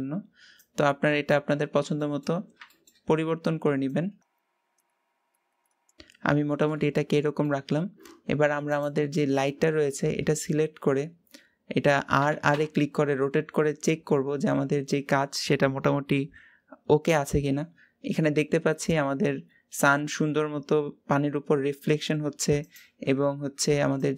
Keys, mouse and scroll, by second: 1.4 scroll down 4, 1.7-3.7 shift+middle drag, 3.7-5.7 drag, 5.7 scroll up 5, 5.9 click, 6.0 KP_0, 6.8-8.6 shift+middle drag, 8.6 click, 9.8 scroll down 3, 10.3-12.0 scroll up 4, 12.0 r.